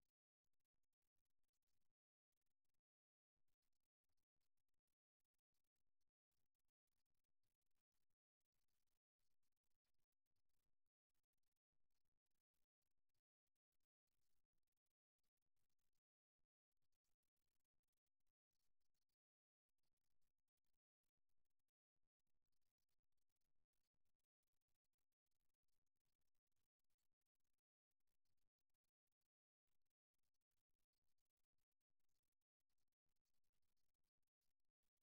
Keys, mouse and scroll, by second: 3.1-5.0 middle drag, 6.9-9.6 drag, 9.9-12.7 drag, 12.9 KP_3, 14.7 g, 18.2-20.1 drag, 19.5 g, 30.9-32.9 middle drag.